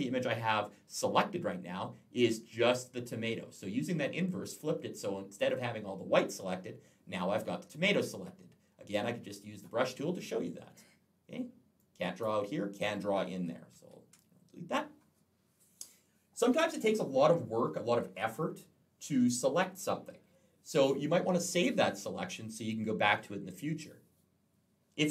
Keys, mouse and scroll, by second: 8.7 click, 11.6 click, 13.1 ctrl+z.